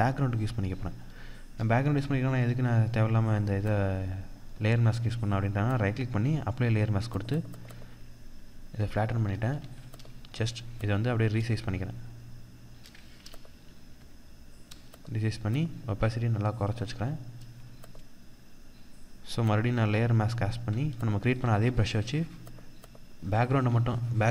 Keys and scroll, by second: 9.0 ctrl+t, 14.1 Return.